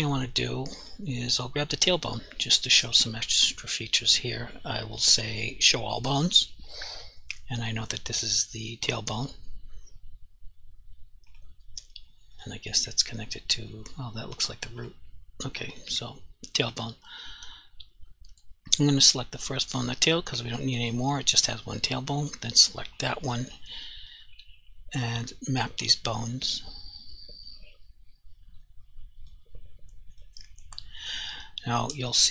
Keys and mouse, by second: 0.8 click, 1.1 g, 1.9 right click, 5.9 click, 8.1 g, 11.3 right click, 12.4 click, 12.8 g, 14.8 right click, 15.9 g, 16.7 right click, 19.7 click, 26.8 click, 28.7 click, 30.2 click.